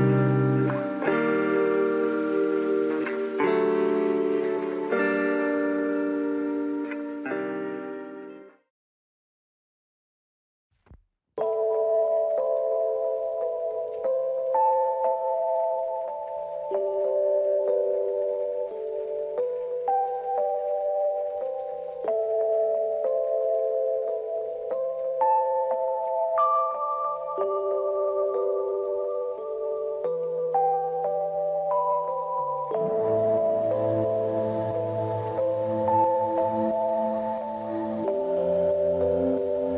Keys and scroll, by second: 24.0 ctrl+=, 24.6 space.